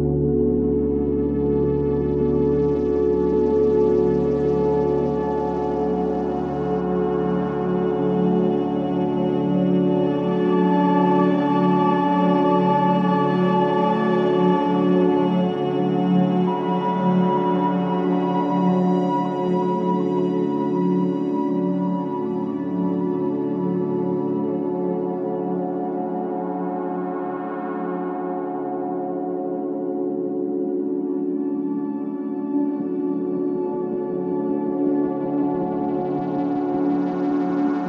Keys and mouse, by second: 1.3 ctrl+c, 5.4-11.2 drag, 12.6-15.4 drag, 17.3 shift+click, 20.0-23.9 drag, 24.6 /, 25.9-27.4 ctrl+alt+drag, 28.0 alt+click, 29.1-31.1 alt+drag, 33.9-36.4 alt+drag.